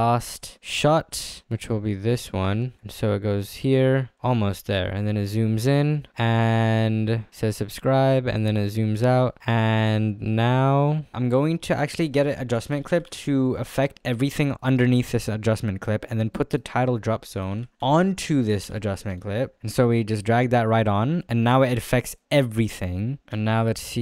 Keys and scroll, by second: 20.0 space.